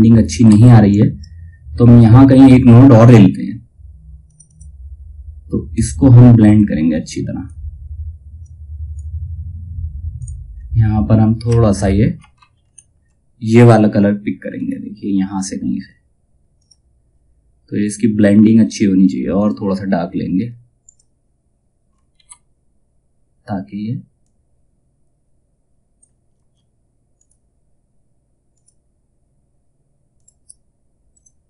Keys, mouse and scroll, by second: 0.0 F2, 0.4 click, 3.8-7.9 drag, 10.0-11.0 scroll down 1, 11.8 ctrl+scroll down 1, 14.0-18.2 alt+scroll up 1, 18.2 click, 18.9 click, 21.7 ctrl+z, 23.7-26.7 drag.